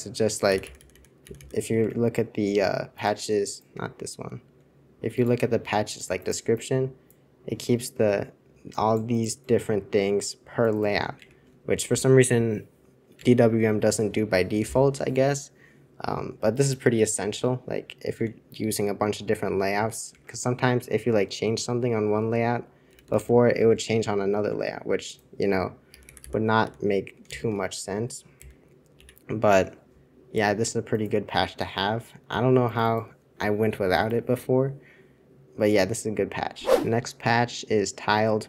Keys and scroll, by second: 0.5 super+h, 0.9 super+h, 1.8 super+h, 1.8 super+2, 11.3 super+1, 13.1 super+2, 20.1 super+2, 21.5 super+Return, 22.8 super+l, 23.0 super+l, 23.1 super+l, 23.5 super+1, 24.4 super+2, 25.8 super+h, 26.0 super+h, 26.2 super+h, 26.6 super+h, 27.3 super+j, 28.3 super+l, 28.9 super+c.